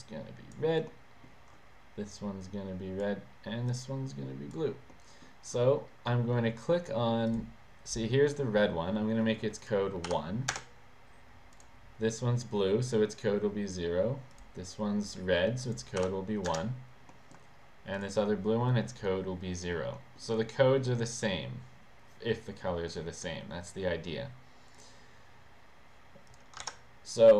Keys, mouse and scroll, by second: 1.1 middle click, 2.2 click, 3.8 click, 5.1 middle click, 6.2 middle click, 7.4 click, 9.8 click, 10.2 1, 10.7 Return, 11.6 click, 14.5 click, 15.8 click, 16.1 1, 16.6 Return, 17.3 middle click, 18.1 click, 20.1 middle click, 24.9 click, 26.3 click.